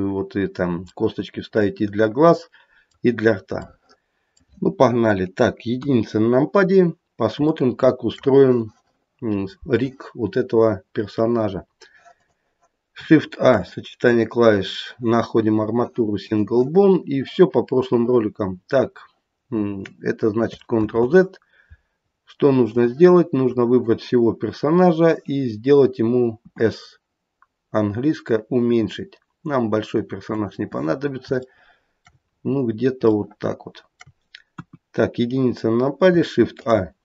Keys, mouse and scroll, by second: 1.0 middle click, 3.6 middle click, 4.1 middle click, 5.8 KP_1, 6.2-7.3 scroll down 2, 7.6 shift+middle click, 10.6-12.1 scroll up 1, 12.1 click, 13.3 shift+a, 20.8 ctrl+z, 22.0-22.6 scroll down 4, 22.6 click, 26.5 s, 30.8-31.5 scroll up 5, 31.5 shift+middle click, 32.0 shift+middle click, 32.2-33.0 scroll up 1, 33.0 scroll up 1, 33.2 shift+middle click, 34.5 KP_1, 36.5 shift+a.